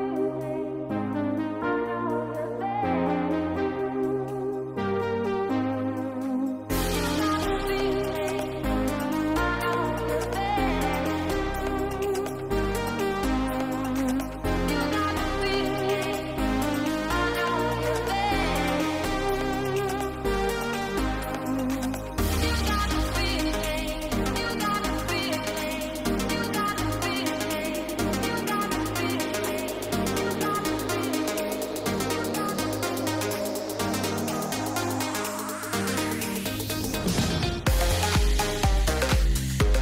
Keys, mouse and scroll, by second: 1.0 s, 2.0 click, 2.6 shift+click, 3.6 s, 4.9 shift+click, 5.4 s, 9.1 Delete, 10.3 g, 11.8 g, 13.5 click, 14.1 g, 15.4 click, 15.6 g, 17.1 click, 17.2 g, 18.2 KP_0, 20.1 drag, 22.1 g, 27.9 drag, 37.6 click.